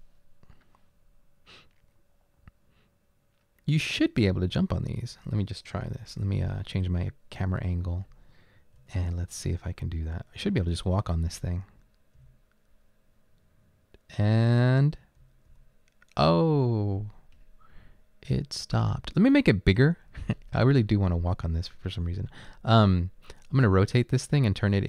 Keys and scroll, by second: 4.3 w, 4.6 space, 5.8 a, 8.8 Right, 9.4 Up, 10.0 Up, 11.3 Down, 12.4 Up, 15.3 Up.